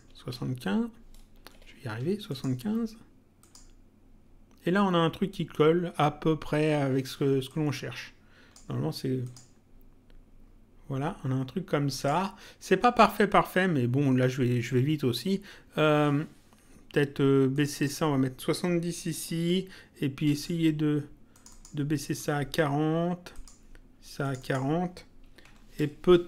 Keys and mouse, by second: 1.3 BackSpace, 2.3 click, 3.4 click, 7.5 click, 9.3 click, 11.9 click, 17.5 click, 20.3 click, 23.3 click, 25.7 Return.